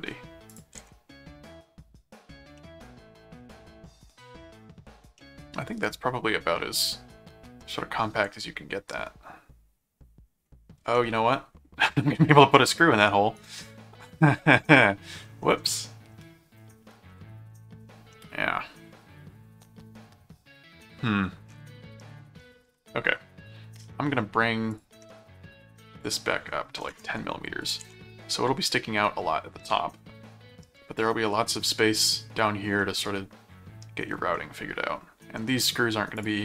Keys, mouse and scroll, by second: 0.5 ctrl+click, 0.8 ctrl+Tab, 2.6-4.7 middle drag, 5.2-10.5 middle drag, 10.9-13.9 middle drag, 14.4 middle click, 15.7 middle click, 17.1 middle click, 18.1-21.2 middle drag, 22.0 middle click, 22.7 ctrl+Tab, 24.7 click, 26.0 click, 27.6 ctrl+click, 27.8 ctrl+Tab, 29.6-30.6 middle drag, 32.8-33.8 middle drag, 34.3-35.4 middle drag, 36.2 click.